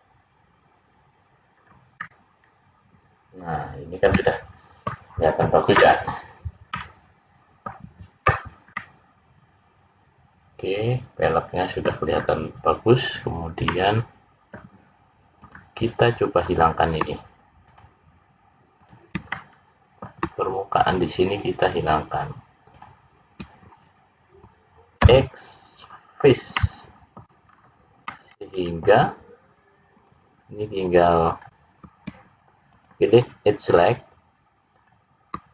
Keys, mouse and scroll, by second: 1.9 middle click, 6.7 middle click, 9.8 middle click, 12.2-12.9 scroll up 1, 12.9-13.6 scroll up 1, 13.6 middle click, 15.3 click, 16.3 click, 17.6 shift+click, 18.7 shift+click, 19.2 middle click, 20.7 shift+click, 21.5 shift+click, 22.6 shift+click, 24.9 x, 26.5 middle click, 27.4-28.0 scroll up 3, 28.0 middle click, 29.9 click, 31.2 click, 32.8 click, 33.3 click, 34.7 click.